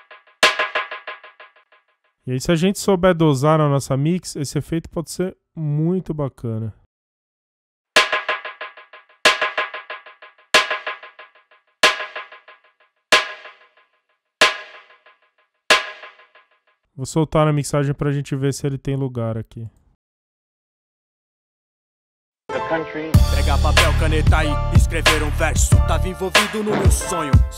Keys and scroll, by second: 1.6 space, 7.7 space, 16.5 space, 20.9 space.